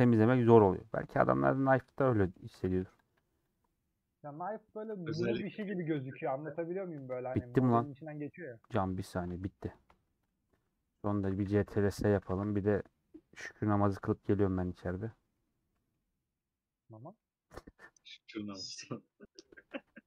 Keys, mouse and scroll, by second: 0.7 click, 1.4 middle click, 1.8 scroll down 1, 1.9 middle click, 2.6 a, 2.7 scroll up 1, 2.7 u, 3.8 scroll down 2, 3.9 middle click, 4.4 scroll up 1, 4.5 middle click, 5.2 /, 5.8 Tab, 6.1-6.6 scroll down 4, 7.0 scroll down 6, 7.1-10.0 middle drag, 10.0 scroll up 1, 10.1-11.5 drag, 11.5 ctrl+s, 11.7 ctrl+s, 19.7 alt+h.